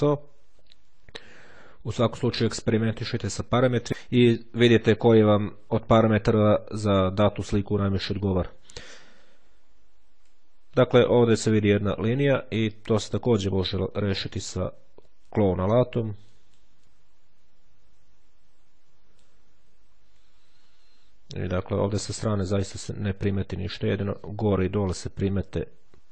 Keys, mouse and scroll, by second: 0.3-0.7 ctrl+scroll down 2, 0.9-1.4 ctrl+scroll up 2, 2.9-3.4 ctrl+scroll down 2, 3.4 ctrl+scroll down 1, 9.5-10.1 ctrl+scroll up 2, 12.1-12.6 ctrl+scroll down 2, 15.2 ctrl+click, 16.2 click, 20.1-20.9 ctrl+scroll down 2, 24.3-24.8 scroll up 2, 25.3-26.1 ctrl+scroll up 1.